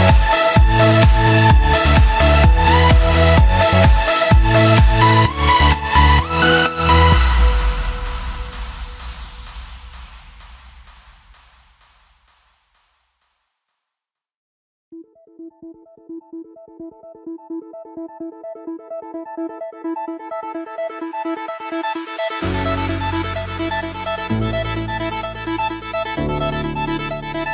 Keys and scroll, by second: 2.2 alt+BackSpace, 10.0 alt+BackSpace, 11.2 ctrl+z.